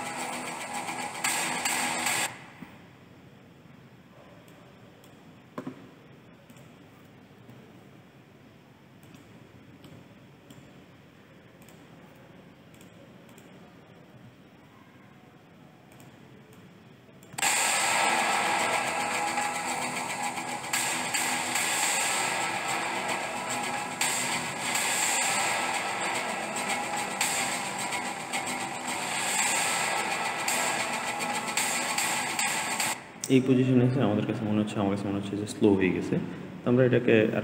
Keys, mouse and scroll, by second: 3.2 space, 4.3 click, 6.4 click, 7.2 g, 9.7 click, 11.5 click, 12.6 click, 13.1 click, 14.0 g, 16.4 click, 17.2 space, 32.7 space.